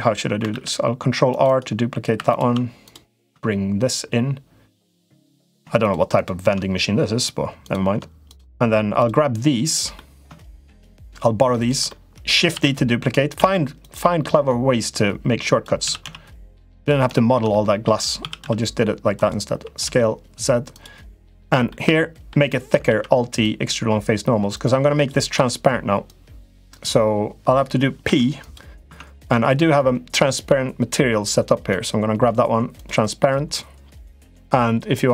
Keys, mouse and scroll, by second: 0.3 ctrl+r, 1.2 ctrl+r, 2.0 3, 3.7-4.8 drag, 5.2 click, 9.7 middle click, 10.5 shift+middle click, 11.6 middle click, 12.3 shift+d, 13.1 s, 14.1-15.4 drag, 15.6 s, 17.0 middle click, 17.3 middle click, 18.0 s, 19.3 s, 21.6 middle click, 22.6 alt+e, 24.7 click, 25.1 l, 25.8 click, 27.8 p, 28.6 Tab, 28.9 click.